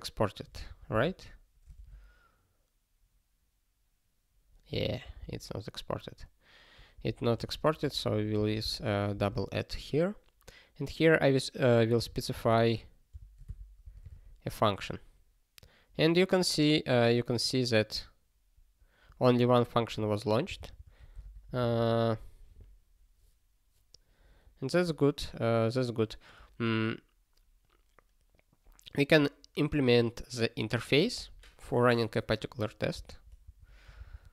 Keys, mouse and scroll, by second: 1.7 alt+<, 5.0 super+b, 6.9 ctrl+a, 7.3 ctrl+f, 7.4 ctrl+f, 7.9 @, 8.4 ctrl+e, 8.6 ctrl+b, 9.1 space, 11.9 n, 13.6 Return, 13.8 ctrl+e, 19.8 click, 20.4 ctrl+space, 20.6 ctrl+n, 20.7 ctrl+n, 21.1 alt+;, 21.7 ctrl+s, 32.9 ctrl+space, 33.1 ctrl+p, 33.4 ctrl+w, 34.0 super+b.